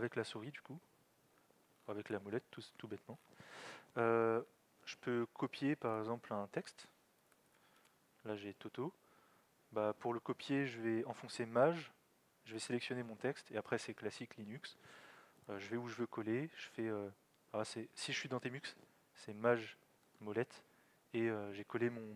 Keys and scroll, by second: 7.0-8.3 typing.